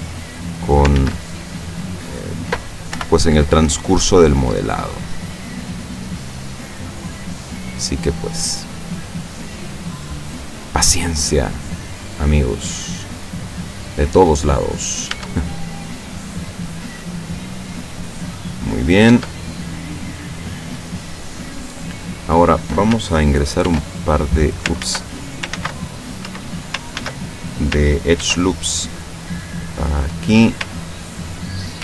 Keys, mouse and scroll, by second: 1.0 ctrl+z, 1.9 middle click, 2.9 o, 3.7 click, 4.3-4.8 scroll down 3, 4.8-6.1 scroll up 3, 7.9-8.4 scroll down 1, 8.9 scroll up 1, 9.7 scroll up 2, 10.7 scroll up 2, 11.2 scroll down 2, 11.2 scroll up 2, 11.3 middle click, 11.8 scroll down 2, 12.0 scroll up 1, 12.2 middle click, 13.1 scroll up 1, 13.3 middle click, 14.2 scroll up 1, 14.4 middle click, 15.1 scroll up 1, 15.2 Tab, 15.6-16.4 middle drag, 16.8-17.8 middle drag, 17.8 scroll up 1, 18.1 scroll down 2, 18.3-19.2 middle drag, 19.1 Tab, 19.8-22.1 middle drag, 22.2 middle click, 23.7 ctrl+r, 24.1 ctrl+click, 24.8 ctrl+z, 26.3 Escape, 27.0 ctrl+z, 28.2 ctrl+r, 28.9 click, 30.1 click.